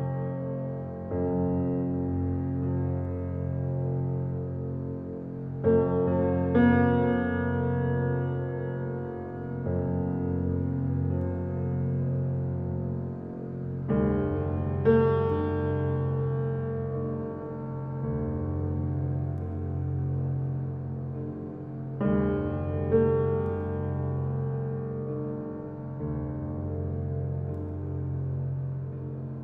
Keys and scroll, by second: 0.4 ctrl+z, 7.9 5, 9.0 Return.